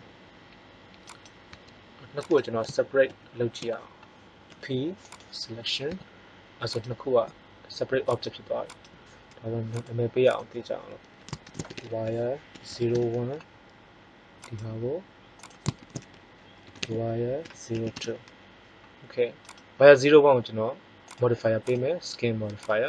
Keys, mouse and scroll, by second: 1.4 Tab, 3.0 ctrl+l, 4.4 p, 5.8 Tab, 14.3-17.9 right drag, 19.3-20.9 right drag.